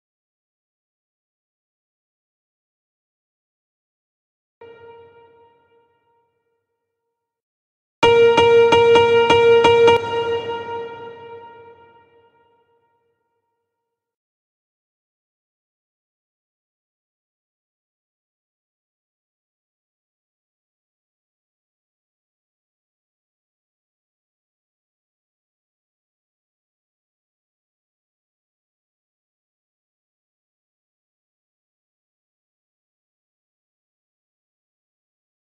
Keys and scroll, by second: 0.7 space, 2.7 space, 7.4 space, 9.5 space, 10.9 space, 14.6 space.